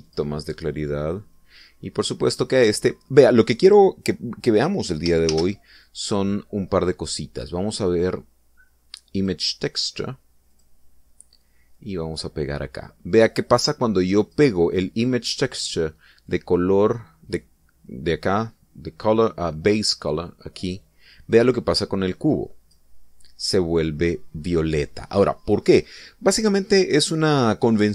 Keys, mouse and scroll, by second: 1.0 click, 3.7-4.6 middle drag, 6.3 shift+a, 10.1 click, 11.5 click, 12.7-15.5 drag, 17.2-23.9 drag.